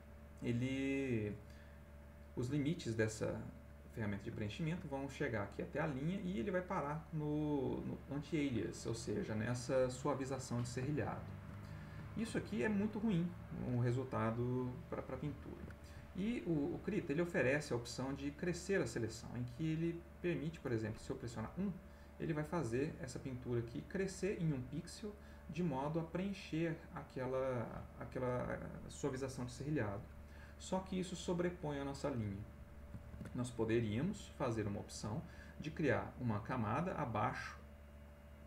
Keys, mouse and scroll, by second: 3.8 middle click, 4.4 ctrl+middle click, 10.5-11.6 ctrl+middle drag, 11.6 ctrl+click, 12.1 ctrl+click, 13.9 click, 15.5 ctrl+z, 18.2 click, 19.0 click, 20.1 click, 21.4 click, 33.1 ctrl+z, 34.6 click.